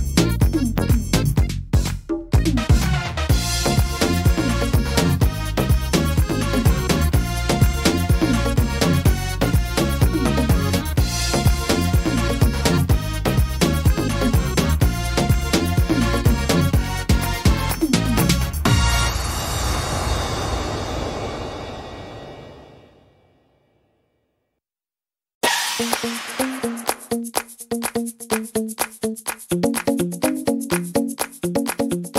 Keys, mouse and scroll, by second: 4.4 middle click, 4.8-5.3 scroll up 4, 5.2 middle click, 5.8 middle click, 6.5 middle click, 7.5 scroll up 1, 7.8 middle click, 9.1 s, 13.6 click, 13.6 middle click, 14.3-14.8 scroll up 2, 14.8 middle click, 15.2 shift+middle click, 15.7 scroll up 1, 15.9 middle click, 16.1 scroll down 2, 17.0 click, 18.5 middle click, 20.9-21.2 scroll up 2, 21.2 middle click, 22.6 click, 26.4 middle click, 26.7-27.6 scroll down 2, 27.6 s.